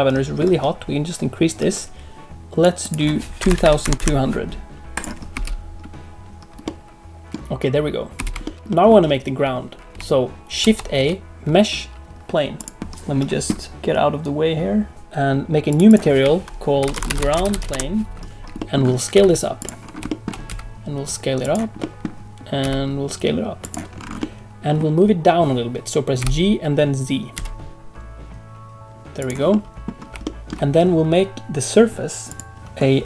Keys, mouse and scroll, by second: 2.4 click, 2.8 click, 3.6 2, 3.9 0, 5.3 space, 6.6 middle click, 8.1 space, 8.4 shift+middle click, 8.5 scroll down 1, 8.6 middle click, 10.6 shift+a, 15.6 click, 15.8 click, 18.5 middle click, 19.1 s, 19.8 scroll down 2, 20.0 shift+middle click, 20.4 s, 21.7 middle click, 22.6 s, 23.9-24.2 scroll up 4, 24.1 middle click, 26.1 g, 29.5 middle click, 29.9 scroll down 1, 30.2 shift+middle click, 32.2 click.